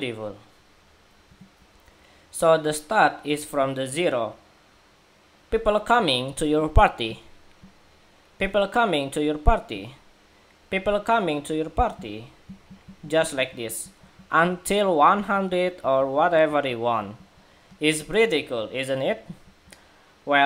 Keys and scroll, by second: 1.3 shift+super+2.